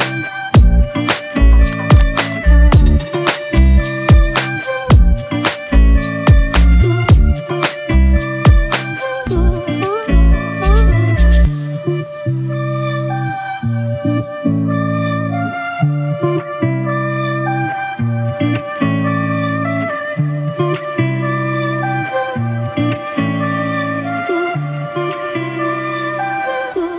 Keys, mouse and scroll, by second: 11.9 alt+click, 13.8 ctrl+t, 20.8 alt+shift+click.